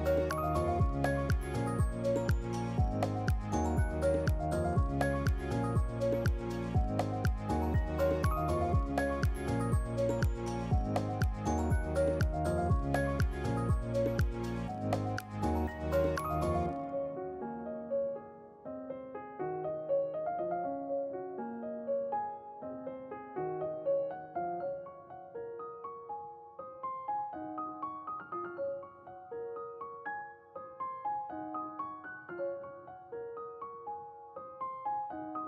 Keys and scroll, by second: 3.3-5.2 typing, 17.0 ctrl+z, 17.4 ctrl+z, 21.7 ctrl+c, 21.9 ctrl+v, 34.2-35.2 typing.